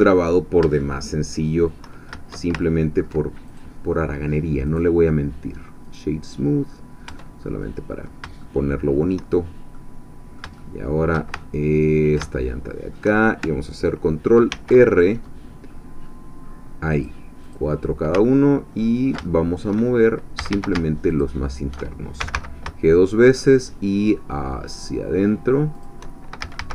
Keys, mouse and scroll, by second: 0.8 shift+click, 2.6-3.7 ctrl+shift+drag, 4.7 right click, 5.8-7.1 drag, 7.1 Tab, 7.6 middle click, 8.4 shift+middle click, 9.3-9.7 shift+scroll down 2, 9.7 middle click, 9.8 click, 11.4-13.2 ctrl+shift+middle drag, 14.5 ctrl+r, 15.7-16.9 scroll up 2, 16.9-18.1 drag, 18.2-19.2 ctrl+middle drag, 19.3 ctrl+shift+click, 20.4 a, 21.1 alt+shift+click, 22.2 alt+shift+g, 25.8 shift+click, 26.4 shift+a.